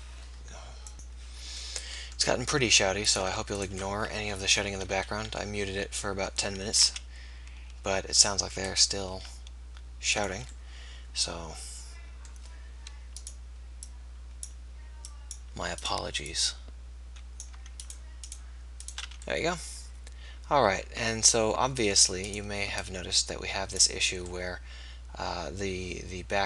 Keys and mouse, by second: 4.6 KP_1, 5.4 KP_7, 7.1 e, 9.2 r, 19.4 f, 19.9 click.